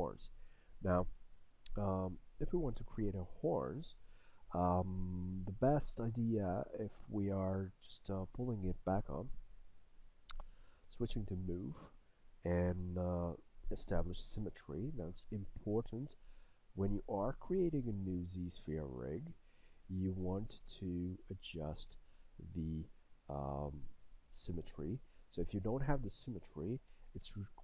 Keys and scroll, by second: 11.2 w, 14.4 x, 27.1 w.